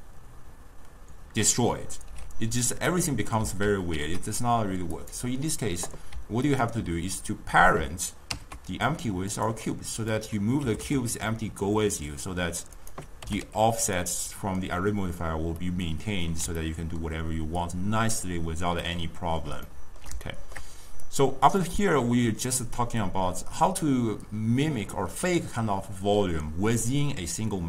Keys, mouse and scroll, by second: 3.8 ctrl+z, 5.1 click, 6.6 ctrl+click, 8.4 ctrl+p, 10.2 click, 10.7 g, 13.3 g, 15.7-21.1 middle drag, 21.1 click, 21.6 click.